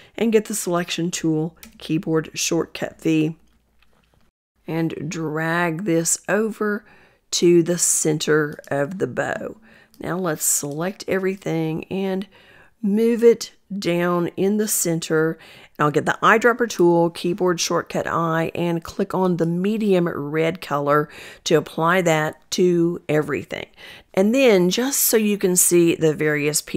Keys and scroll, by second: 0.0 v, 15.7 i.